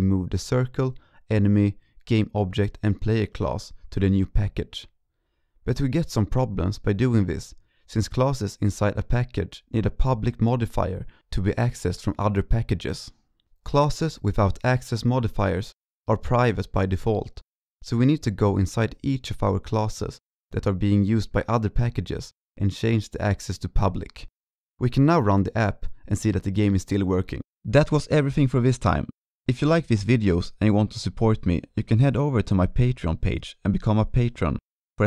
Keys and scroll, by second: 0.9-1.4 ctrl+scroll, 2.0-2.3 ctrl+scroll, 11.4 ctrl+s, 12.5 ctrl+Left, 13.1 ctrl+s, 15.4 ctrl+b, 15.7 ctrl+Left, 16.2 ctrl+s, 20.6 ctrl+BackSpace, 21.6 ctrl+s.